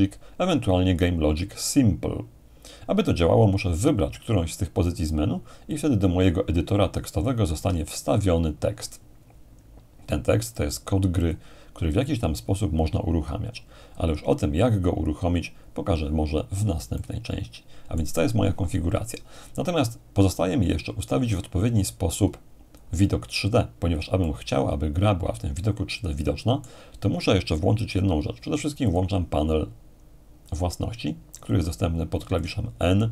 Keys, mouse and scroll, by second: 5.7-6.7 drag, 7.9-8.9 ctrl+scroll up 2, 10.5-12.3 drag, 14.4-15.0 scroll down 2, 15.0-16.1 scroll up 2, 16.9-18.9 middle drag, 20.3-23.7 drag, 24.2-27.6 middle drag, 28.9-29.9 drag, 30.5-33.1 drag.